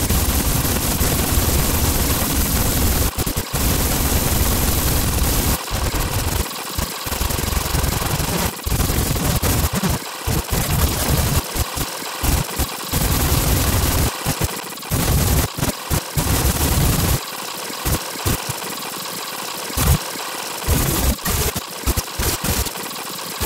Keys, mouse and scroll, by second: 0.0 alt+click, 0.2 alt+click, 0.5 alt+click, 0.7 alt+click, 0.9 scroll down 2, 1.0 ctrl+click, 1.1 right click, 1.2 ctrl+click, 1.4 alt+click, 1.7 alt+click, 2.2 alt+click, 2.3 click, 2.8 scroll up 2, 3.0 space, 3.1 ctrl+click, 3.1 space, 3.2 click, 3.3 click, 3.4 click, 3.6 scroll down 2, 3.7 ctrl+click, 4.0 click, 4.1 click, 4.3 click, 4.6 click, 4.8 click, 4.9-5.4 scroll down 2, 5.0 click, 5.4 ctrl+click, 5.6 click, 5.7 scroll up 2, 5.9 click, 6.0 space, 6.1 click, 6.3 space, 6.5 click, 6.7 click, 6.7 space, 6.9 click, 6.9 space, 7.0 scroll up 1, 7.2 ctrl+z, 7.7 click, 7.8 click, 8.1 alt+click, 8.3-11.5 typing, 8.3 scroll down 2, 8.5 right click, 8.9 click, 9.2 click, 9.4 click, 9.5 click, 9.7 scroll down 2, 9.8 click, 9.9 scroll up 2, 10.0 click, 10.2 click, 10.4 alt+click, 10.6 click, 10.7 click, 10.9 scroll up 2, 11.0 right click, 11.1 ctrl+click, 11.1 right click, 11.4 scroll up 2, 11.4 Delete, 11.5 ctrl+click, 11.7 click, 11.8 scroll down 2, 12.5 space, 12.8 ctrl+click, 12.9 scroll down 1, 13.0 ctrl+click, 13.2 right click, 13.3 ctrl+click, 13.8 right click, 13.9 click, 14.1 click, 14.2 scroll down 2, 14.3-15.9 typing, 14.4 click, 14.5 right click, 14.6 ctrl+click, 14.8 scroll down 2, 15.3 click, 15.7 click, 16.0 alt+click, 16.3 click, 16.4 click, 16.6-17.1 scroll down 2, 17.1 right click, 17.2 ctrl+click, 17.8 space, 17.9 click, 18.1 right click, 18.2 ctrl+click, 18.2 space, 18.3 ctrl+z, 18.3 scroll down 2, 18.7 scroll up 1, 18.9 ctrl+click, 19.2-19.7 scroll down 4, 19.9 right click, 20.0 ctrl+click, 20.4 scroll down 2, 20.5-23.4 typing, 20.7 click, 20.9 scroll down 2, 21.2 scroll up 2, 21.5 middle click, 21.6 scroll down 2, 21.7 middle click, 21.8 scroll up 2, 21.9 middle click, 22.1 middle click, 22.7 scroll up 2, 22.9 ctrl+z.